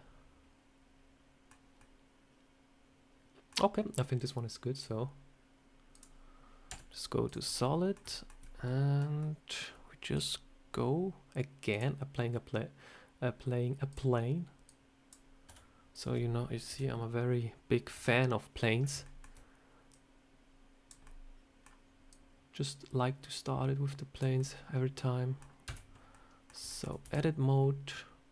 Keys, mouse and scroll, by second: 1.7 middle click, 4.6 click, 6.6 z, 7.3 scroll up 2, 7.5 middle click, 8.0 shift+middle click, 8.3 scroll down 2, 8.5 middle click, 9.1 middle click, 10.0 click, 11.6 click, 14.6 click, 15.4 s, 16.6 KP_7, 17.8 KP_1, 18.7 scroll up 3, 18.9 shift+middle click, 19.8 click, 20.9 middle click, 22.0 click, 24.3 middle click, 25.5 Tab, 26.0 middle click, 26.6 shift+middle click, 26.9 e.